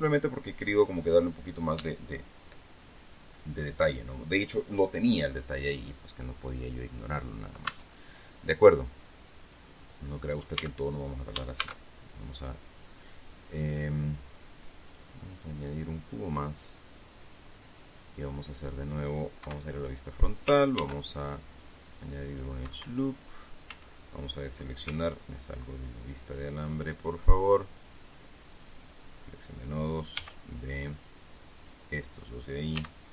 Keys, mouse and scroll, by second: 8.2 Tab, 11.1 a, 12.1 shift+a, 15.4 click, 15.7-17.1 middle drag, 17.1-19.7 drag, 20.0 KP_1, 21.3 ctrl+r, 22.9 click, 23.2 Escape, 24.3 a, 25.4 z, 29.1 click, 30.7 b, 31.5 click.